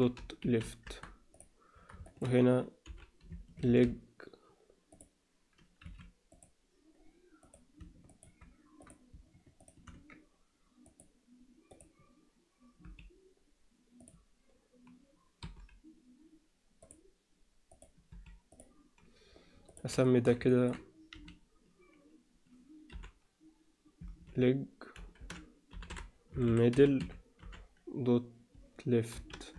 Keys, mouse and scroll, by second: 0.2 p, 1.3 click, 2.0 alt+shift+middle click, 2.8 l, 3.3 e, 5.8 x, 7.4 click, 8.1 shift+click, 8.8 click, 9.6 shift+click, 10.9 click, 11.7 click, 12.8 Delete, 15.4 Delete, 17.7 click, 18.1 Delete, 19.6 click, 20.0 alt+shift+middle click, 20.5 ctrl+middle click, 21.1 F2, 26.5 d.